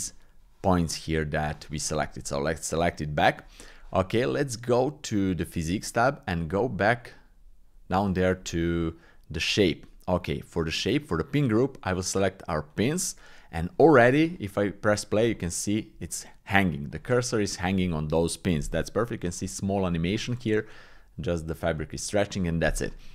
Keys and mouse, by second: 3.4 Tab, 5.1 click, 11.4-12.8 drag, 17.0 click, 19.3 click, 21.7 click.